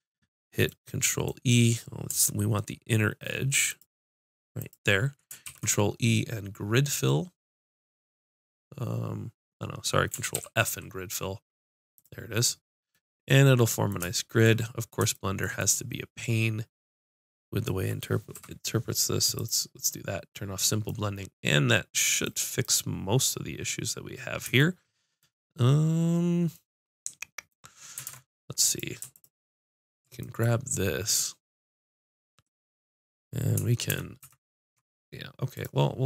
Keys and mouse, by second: 3.8-5.4 drag, 5.4 ctrl+e, 10.3 ctrl+f, 12.6 middle click, 16.5 middle click, 18.3 F6, 24.6 middle click, 26.0 middle click, 28.0 ctrl+Tab, 29.1-30.3 drag, 30.3 middle click, 30.4 click, 33.9 ctrl+KP_Subtract.